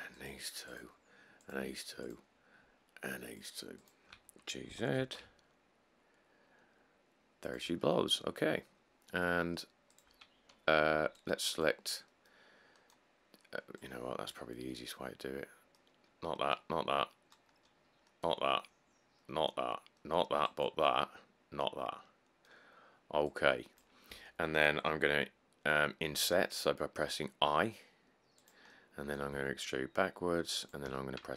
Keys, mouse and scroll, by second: 4.9 g, 5.2 z, 11.2 c, 17.7-22.8 middle drag, 26.3 i, 29.5 e, 31.1 x.